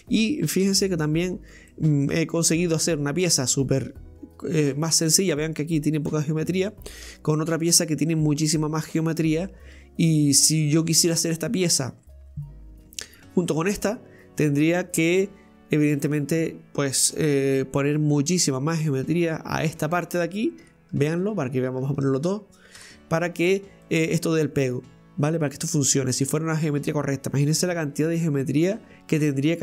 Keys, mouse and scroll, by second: 0.7 Tab, 1.4 scroll up 1, 1.7-7.1 middle drag, 7.1 Tab, 7.4 right click, 7.7 Tab, 8.1 scroll up 2, 8.8-21.0 middle drag, 21.0 Tab, 21.1 right click, 22.1 shift+right click, 22.8 Tab, 23.2-23.8 scroll down 2, 23.8-29.6 middle drag.